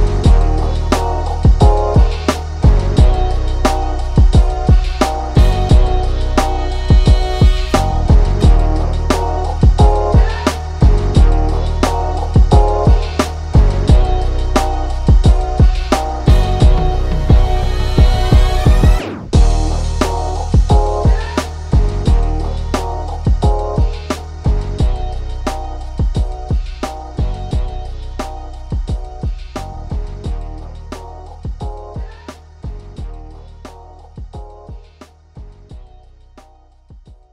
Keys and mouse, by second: 2.1 ctrl+], 2.7 ctrl+shift+[, 3.1 ctrl+], 3.6 click, 4.7 click, 6.4 click, 7.6 space, 8.2-9.8 alt+drag, 9.8 ctrl+shift+[, 10.3 ctrl+], 10.7 click, 11.7 click, 13.2 click, 13.9 click, 14.4 click, 16.6 right click, 18.0-23.0 drag, 24.1 click, 26.0 click, 26.9 click, 28.9 click, 29.0 ctrl+=, 30.0 click, 31.4 click, 31.6 ctrl+z, 32.3 click, 33.3 click, 34.5 click, 35.5-37.3 drag.